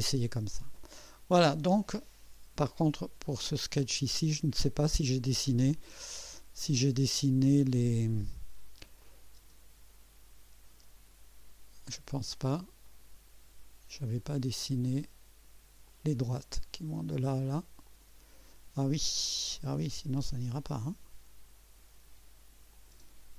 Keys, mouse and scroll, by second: 0.7 click, 3.4 click, 9.0 click, 9.4 space, 10.7 space, 10.7 space, 12.8 click, 15.8 click, 17.8 click, 20.8 click, 22.7 click.